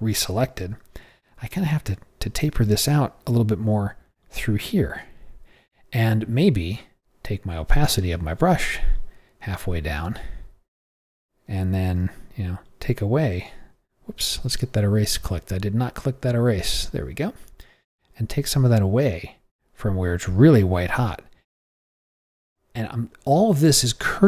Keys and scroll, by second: 0.6 ], 2.3 ], 12.0 ], 13.2 ].